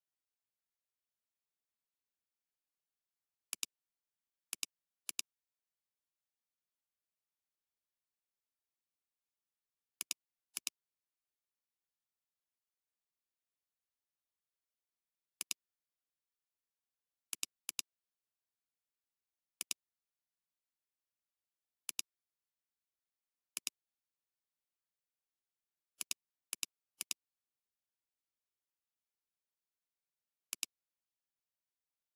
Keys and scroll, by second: 2.5 space, 13.4 space, 21.6 ctrl+z.